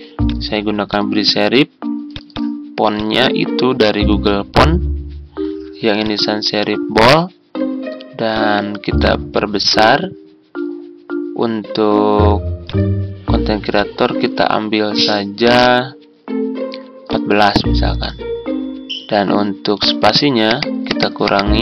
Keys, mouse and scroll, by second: 0.0-1.6 typing, 3.1-4.7 typing, 9.1-10.6 typing, 14.1-15.6 typing, 20.2 typing.